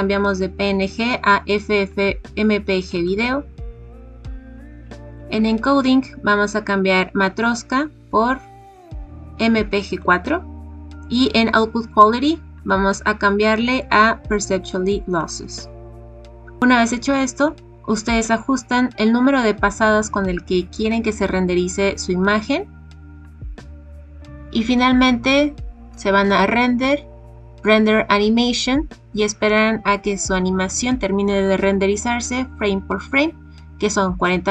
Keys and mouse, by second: 7.4-10.1 drag, 12.6-15.3 drag, 17.3 click, 26.3-34.5 drag.